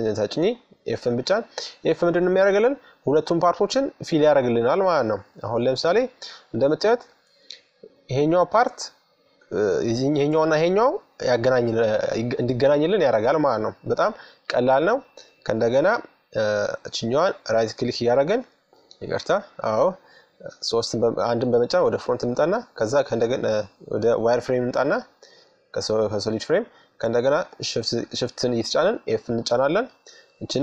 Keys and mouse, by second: 3.3-5.9 drag, 5.9-7.8 middle drag, 11.3 KP_3, 12.6 KP_1, 13.8-14.8 middle drag, 14.9-15.9 middle drag, 16.3-17.6 right drag, 17.6-18.6 drag, 18.7-19.9 middle drag, 18.7 KP_3, 19.9 KP_1, 23.2-24.9 drag, 25.9-27.7 right drag, 28.0 f, 29.5-30.6 right drag.